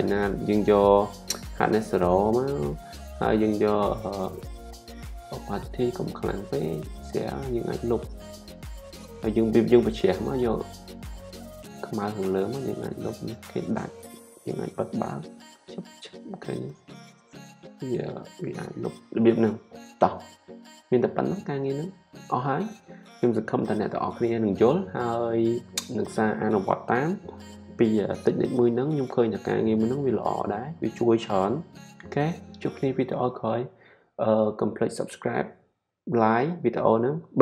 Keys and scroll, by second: 10.7 x.